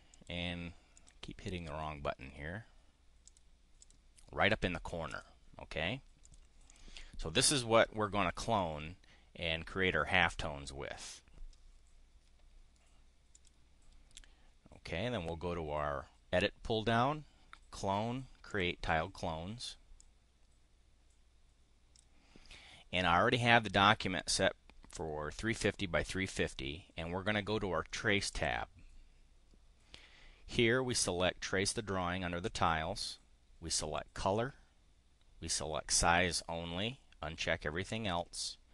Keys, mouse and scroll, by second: 0.0 click, 0.9 click, 3.2 click, 3.8 click, 5.1 click, 6.2 click, 6.5 click, 13.3 click, 18.5 click, 20.0-22.1 drag, 28.4 click.